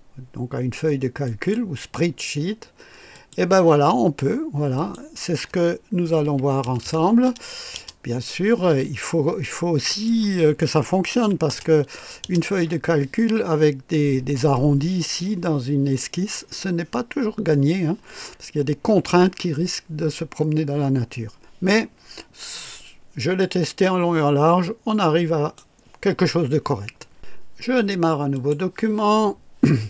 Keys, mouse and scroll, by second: 1.3 click, 3.2 click, 4.8 click, 6.2 KP_1, 6.6 KP_0, 7.7 Return, 9.9 click, 11.2-11.7 typing, 12.2 Return, 23.4-25.8 drag, 28.3 click.